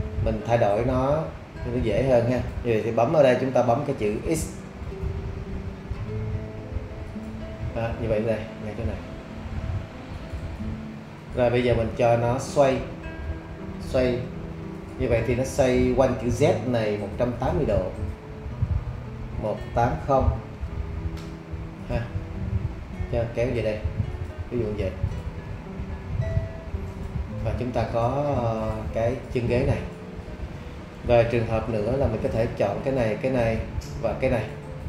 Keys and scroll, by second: 6.5 x, 19.2 1, 19.8 8, 21.1 Return.